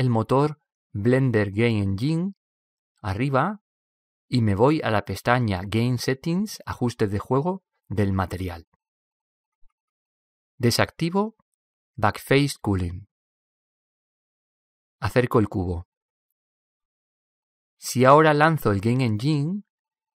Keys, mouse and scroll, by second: 0.9-2.6 drag, 11.8-15.9 drag, 16.9-18.7 middle drag.